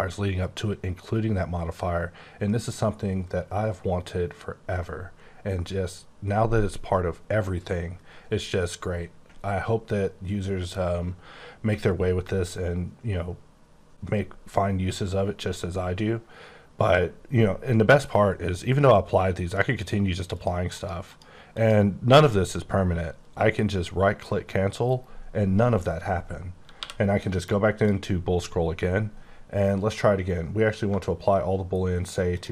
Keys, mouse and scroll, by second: 19.7 click, 20.3 click, 20.7 click, 21.1 click, 21.5 click, 24.9 right click, 27.1 click, 30.8 click, 32.1 click.